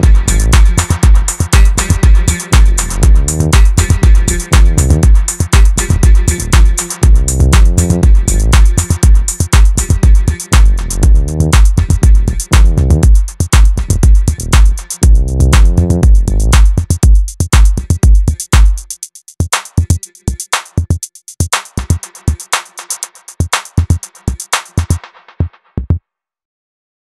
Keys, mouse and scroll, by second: 0.9 KP_1, 1.4-1.7 scroll up 2, 1.7-2.2 shift+middle drag, 2.2 scroll down 1, 2.5-3.8 middle drag, 3.8 scroll up 1, 3.9-4.3 shift+middle drag, 4.3 scroll up 1, 4.5 middle click, 4.9 Tab, 5.4-6.4 middle drag, 6.4 click, 6.9-8.0 middle drag, 8.0 click, 9.6 ctrl+z, 10.2 click, 12.6 KP_1, 13.0-13.4 scroll down 1, 13.4 Tab, 13.7-15.1 middle drag, 15.1 scroll up 1, 15.2 KP_1, 15.7-17.1 shift+middle drag, 17.1 Tab, 17.4-20.2 middle drag, 20.2 click, 20.6 middle click, 21.3 click, 22.5 middle click, 23.0 KP_1, 23.4-23.7 scroll down 2, 23.7 Tab, 24.0-26.0 middle drag, 26.0 KP_1, 26.5-26.9 shift+middle drag, 26.9-27.0 scroll up 1.